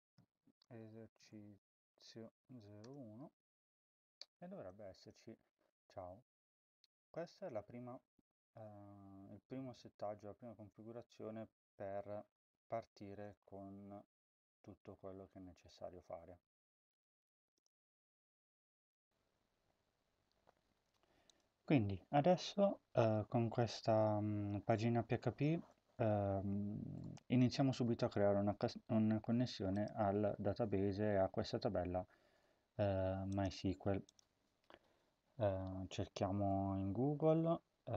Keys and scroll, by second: 0.0-3.0 typing, 37.8-37.9 typing.